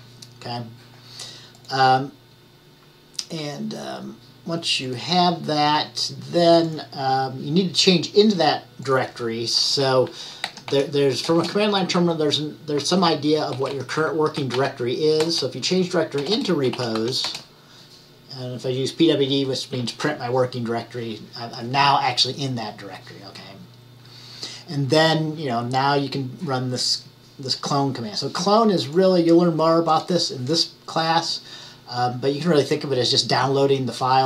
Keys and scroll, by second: 10.3-11.3 typing, 13.4-15.1 typing, 16.5-17.6 typing.